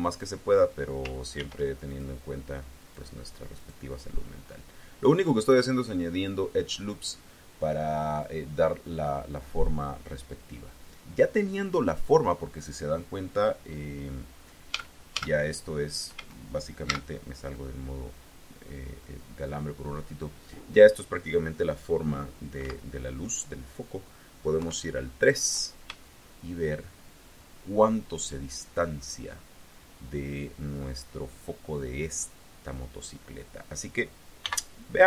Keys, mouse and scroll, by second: 1.2 ctrl+r, 1.8 ctrl+click, 2.6 click, 3.4 click, 4.3-5.6 drag, 6.0 scroll up 1, 6.1-6.6 scroll down 2, 14.6 a, 16.0 a, 16.7 z, 22.5 z, 24.4 KP_3, 25.9 shift+click, 26.3-27.9 shift+middle drag, 34.3 n.